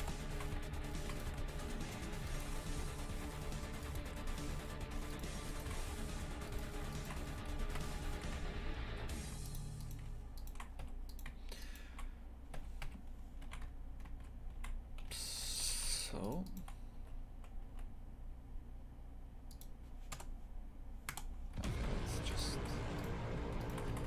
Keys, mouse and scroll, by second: 0.0 KP_0, 0.3 shift+f, 1.2 a, 1.6 a, 1.8 ctrl+r, 2.7 a, 3.1 ctrl+r, 4.9 1, 5.1 right click, 5.5 shift+right click, 6.3 j, 6.5-7.5 right drag, 7.5 j, 7.8 KP_Divide, 8.1 shift+f, 9.8 right click, 10.8 j, 11.1 right click, 11.6 shift+right click, 12.5 j, 12.8 KP_Divide, 13.5 shift+f, 15.6 2, 15.8 a, 16.2 alt+shift+right click, 16.4 alt+shift+right click, 17.0 s, 20.1 KP_0, 21.1 KP_0, 21.6 shift+f, 22.5 3, 23.0 right click, 23.6 shift+right click, 23.9 shift+f.